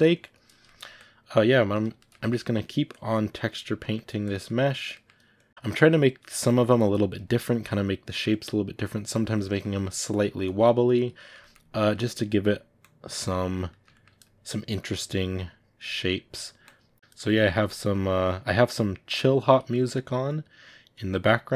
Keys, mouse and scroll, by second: 0.5 ctrl+middle click, 0.8-1.9 drag, 1.9 ctrl+shift+middle click, 2.8 click, 3.7 middle click, 4.1 click, 4.3 middle click, 5.3 click, 6.2 middle click, 6.7 click, 7.4 middle click, 7.9-9.4 drag, 9.4 ctrl+middle click, 9.9-11.1 drag, 11.1 ctrl+middle click, 11.7-13.6 drag, 13.6-14.7 ctrl+middle drag, 14.7-15.8 drag, 15.8 middle click, 16.5 click, 17.1-18.1 ctrl+middle drag, 18.1-19.6 drag, 19.6 middle click, 20.2 click, 21.0 middle click.